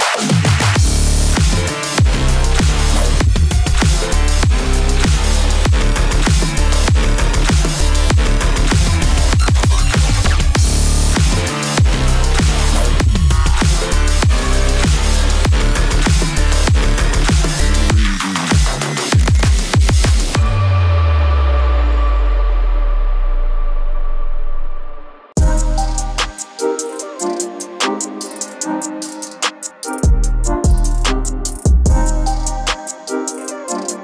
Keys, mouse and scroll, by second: 2.1-13.5 drag, 13.5 right click, 18.4 click, 18.5 click, 22.0-29.7 drag, 33.9-34.0 drag.